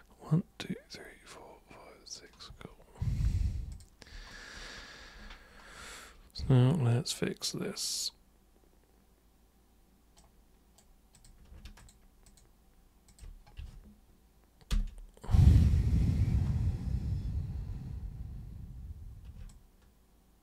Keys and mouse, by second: 3.7 super+click, 10.2 super+right click, 11.2 super+click, 11.8 ctrl+shift+super+click, 12.3 ctrl+shift+super+click, 13.1 ctrl+shift+super+click, 19.5-20.4 alt+super+drag.